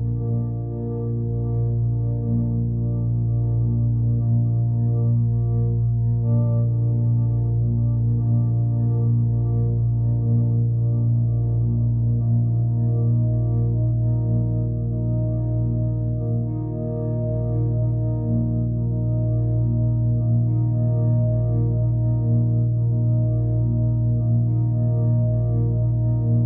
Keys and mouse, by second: 8.8-9.8 drag, 11.1 click, 13.3 click, 14.5 click, 16.2 click, 17.7 click, 21.0 click, 21.8-26.0 drag, 26.3-26.4 drag.